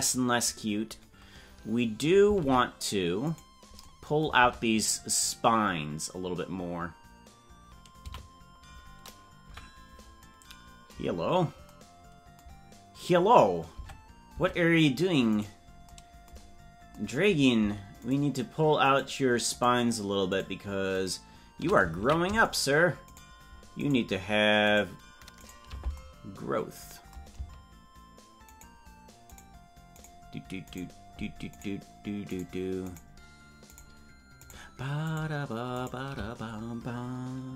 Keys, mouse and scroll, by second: 3.4-3.9 right drag, 4.5 Tab, 8.1 a, 9.5 KP_Decimal, 11.3 scroll up 2, 13.8 Tab, 15.3 right click, 16.6 scroll up 2, 18.0-21.6 shift+right drag, 21.9 ctrl+z, 22.5 shift+right click, 28.5-36.1 shift+right drag.